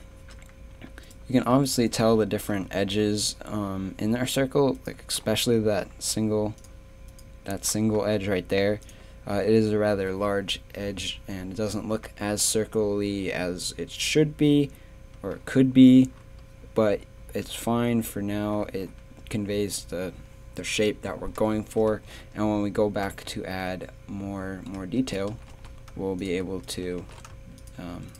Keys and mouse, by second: 0.1 Tab, 0.7 a, 2.6 a, 9.5 a, 13.6 z, 16.8 z, 17.7 Tab, 18.6 z, 18.8 Tab, 21.6 Tab, 22.0 z, 24.8 Tab, 25.3 g, 26.8 g.